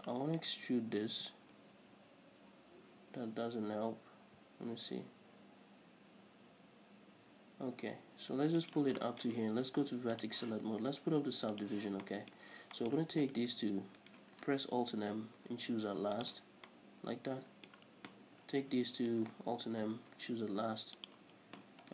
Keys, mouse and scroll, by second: 0.7-9.0 middle drag, 1.5 e, 9.0 shift+click, 9.3-10.5 middle drag, 10.5 click, 11.8 click, 12.3-13.5 shift+middle drag, 12.8 scroll up 2, 13.5 right click, 14.3 shift+right click, 15.2 alt+m, 17.0-18.8 middle drag, 18.8 right click, 19.3 shift+right click, 20.0 alt+m.